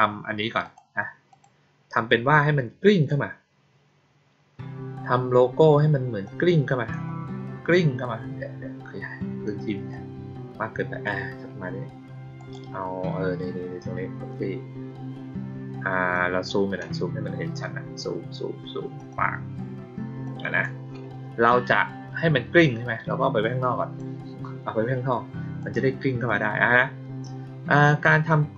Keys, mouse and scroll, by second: 0.6 click, 1.2 click, 2.0-3.0 drag, 6.2-6.8 drag, 9.8-10.9 drag, 12.3 click, 16.1-16.4 drag, 18.9 click, 20.2-20.5 drag, 22.1-23.9 drag, 25.0-25.5 drag, 26.2-28.5 drag.